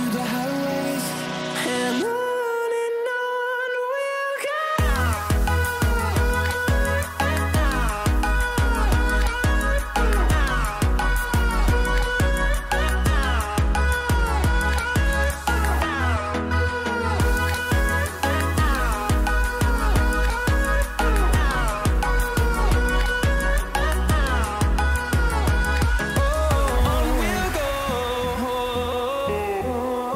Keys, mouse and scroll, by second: 20.1-27.4 drag, 29.9 scroll down 1.